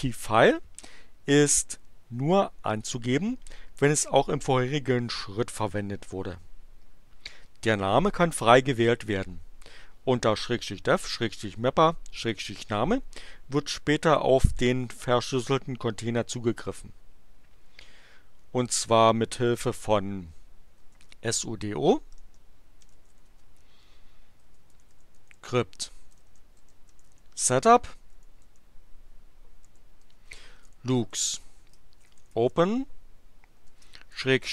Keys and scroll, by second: 20.5-34.5 typing.